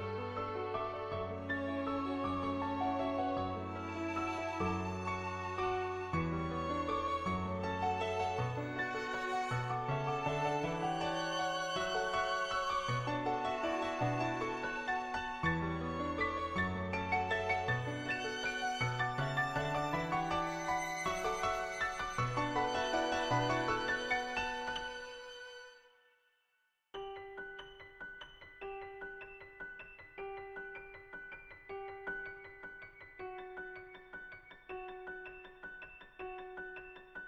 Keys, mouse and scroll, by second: 0.3 ctrl+z, 0.7 click, 1.5 click, 2.6 [, 3.2 click, 3.9 click, 7.8 middle click, 8.7 middle click, 10.2 click, 11.6 click, 14.4-14.7 ], 14.7 click, 15.4 ctrl+z, 15.8 ctrl+z, 18.9 click, 20.4 ctrl+z, 20.8-21.6 [, 21.6 click, 22.6 ctrl+z, 24.5-27.0 typing, 24.8 click, 26.0 click, 27.4 click, 28.2 click, 29.3 click, 30.1 click, 30.7 click, 31.1 click, 31.9 [, 32.3 [, 32.5 click, 33.1 ], 34.7 ], 35.1 click, 35.1 ], 36.0 [, 36.1-37.2 drag.